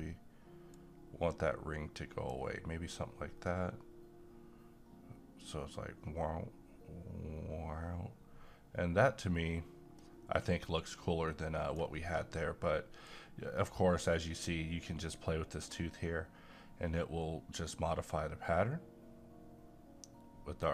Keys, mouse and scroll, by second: 0.7-3.5 drag, 3.5-13.0 right drag, 13.0-20.7 drag.